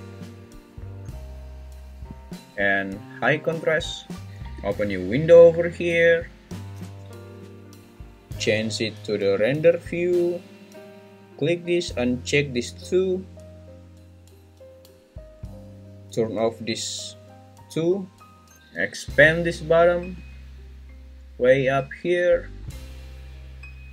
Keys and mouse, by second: 2.2-3.3 drag, 4.5-6.9 drag, 9.5 click, 11.5-13.8 drag, 16.3 click, 17.6 click, 20.1-21.4 drag.